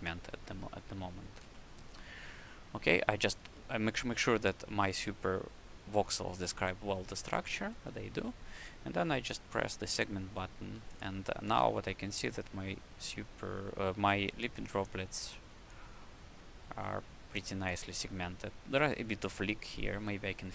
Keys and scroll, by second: 0.2 q, 1.3 shift+c, 3.3 ctrl+z, 7.5 shift+c, 11.3 alt+a.